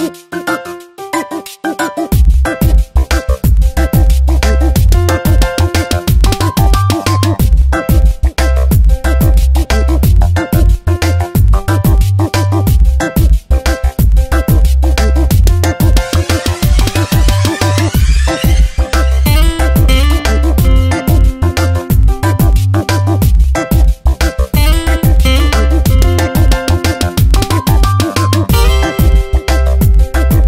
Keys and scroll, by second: 4.5 m, 6.5 ctrl+j, 7.1 v, 8.7 ctrl+z, 9.0 v, 11.0 Tab, 13.1 ctrl+t, 17.3 Return, 19.0 ctrl+shift+], 21.0 ctrl+t, 22.7 ctrl+t, 24.3 Return, 25.8 ctrl+t, 28.6 Return, 29.1 Up, 30.0 Tab.